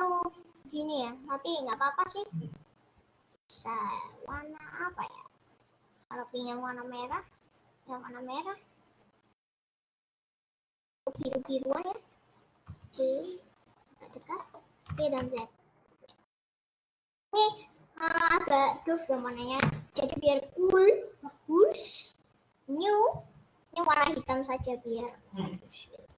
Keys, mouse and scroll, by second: 11.6 middle click, 11.9 scroll down 2, 12.7 g, 14.3 middle click, 14.8 g, 17.4 click, 17.6 scroll up 4, 23.1 click.